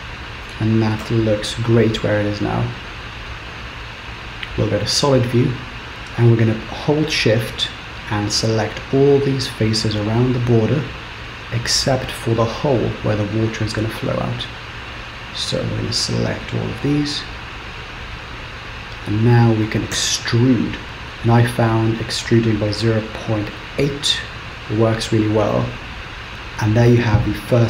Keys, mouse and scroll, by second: 2.2 z, 5.9 shift+click, 8.7 shift+click, 9.5 shift+click, 10.5 shift+click, 11.1 shift+click, 11.8 shift+click, 12.6 shift+click, 13.5 shift+click, 14.2 shift+click, 16.5 shift+click, 17.8 shift+click, 18.5-19.0 scroll down 2, 19.0 scroll up 2, 20.0 e, 25.1 scroll down 2, 25.6 middle click.